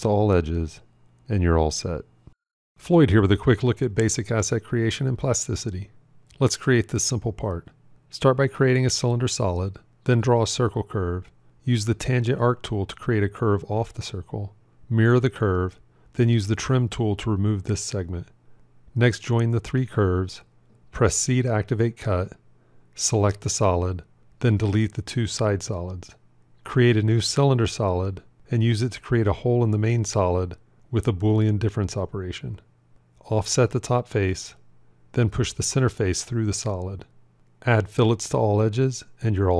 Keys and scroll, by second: 14.8 alt+x, 20.1 j, 21.3 c, 32.6 q, 35.0 o.